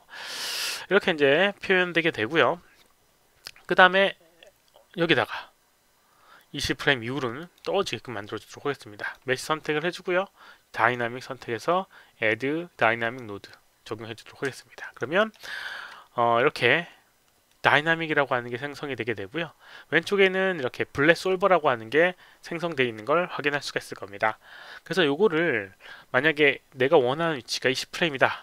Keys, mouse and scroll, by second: 0.8-2.2 alt+drag, 7.3 click, 8.9 click, 10.7 click, 13.0 click, 14.5 alt+click, 15.1 alt+middle click, 15.4 alt+click, 21.0 click.